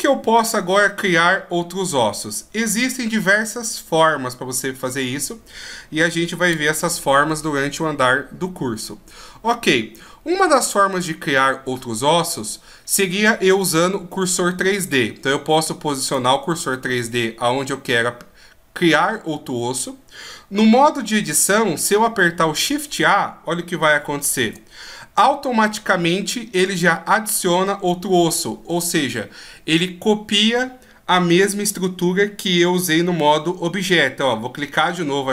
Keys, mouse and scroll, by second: 12.3-15.2 scroll down 1, 15.9 click, 24.2 shift+a.